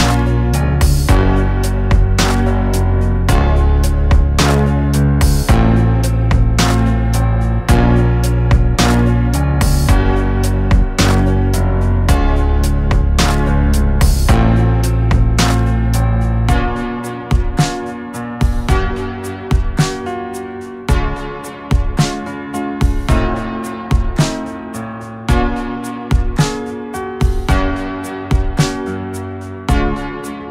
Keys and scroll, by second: 20.4 shift+e, 25.4 Tab, 29.0 KP_1.